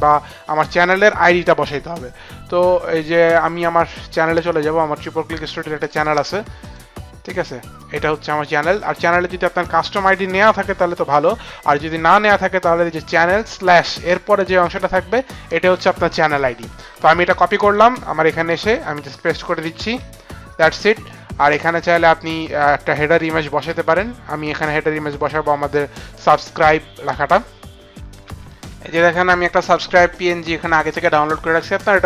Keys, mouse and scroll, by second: 4.4 click, 5.9 middle click, 8.0 click, 14.6 click, 17.0 ctrl+c, 17.6 click, 18.8 click, 19.7 ctrl+v, 24.4 click, 26.6 click, 30.1 click.